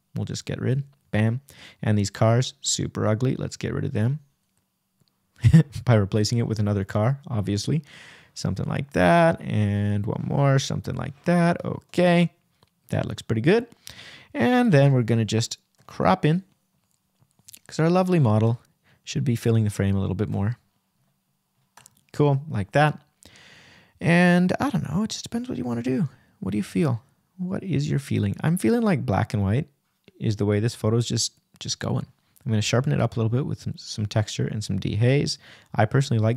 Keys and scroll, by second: 4.3 Return, 8.2 r, 10.9 Return, 12.8 r, 14.2 Return.